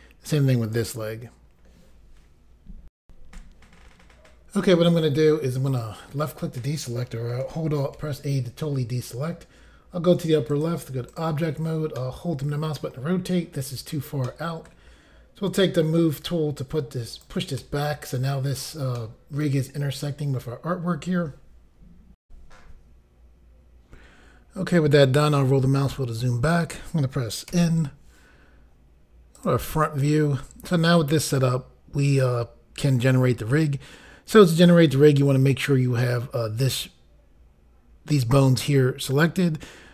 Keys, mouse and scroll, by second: 3.0 Pause, 5.7 click, 7.9 alt+a, 10.5 click, 10.6 click, 11.1 click, 11.2 click, 12.0 middle click, 14.7 middle click, 16.0 click, 17.6 middle click, 19.0 middle click, 22.2 Insert, 23.2 Pause, 24.5 scroll down 2, 28.5 n, 29.3 click.